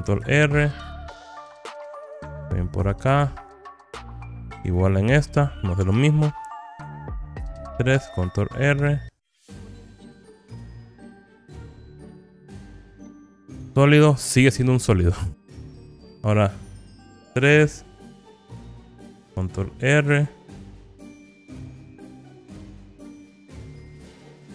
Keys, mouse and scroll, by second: 0.5 ctrl+r, 3.6 click, 4.7 click, 6.1 3, 6.4 click, 8.0 ctrl+r, 11.3 click, 12.8 click, 17.6 3, 18.5 click, 20.0 ctrl+r, 23.7 click.